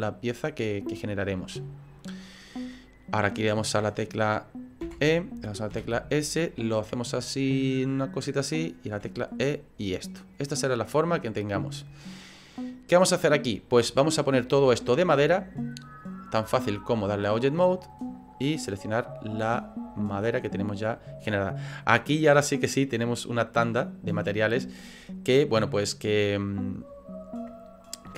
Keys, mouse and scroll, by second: 10.5 middle click, 10.5 e, 11.0 right click, 11.5 middle click, 15.0 middle click, 16.5 click, 20.1 click.